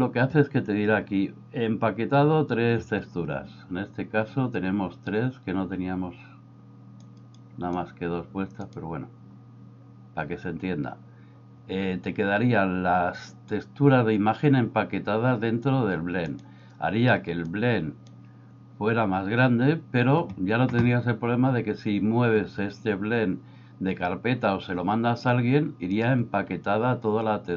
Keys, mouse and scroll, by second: 7.1 click, 8.7-16.4 drag, 17.4 click, 27.3 click.